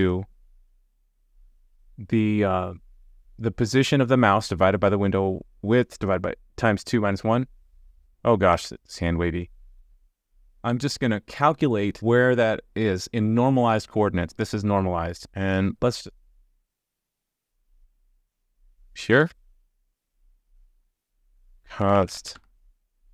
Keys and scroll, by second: 8.6 super+z.